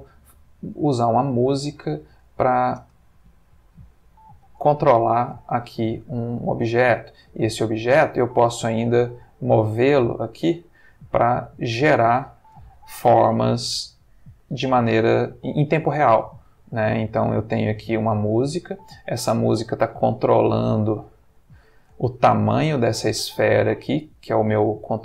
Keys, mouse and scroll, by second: 0.2-0.9 middle drag, 1.6-2.9 middle drag, 2.8 ctrl+space, 4.1-4.6 middle drag, 4.8-5.4 ctrl+middle drag, 6.0-6.8 middle drag, 7.4 g, 11.7 click, 12.1 ctrl+middle click, 13.4 g, 13.6 middle click, 18.5 click, 19.2 middle click, 20.0 g, 21.3 click, 22.0 ctrl+middle click, 22.9 ctrl+g.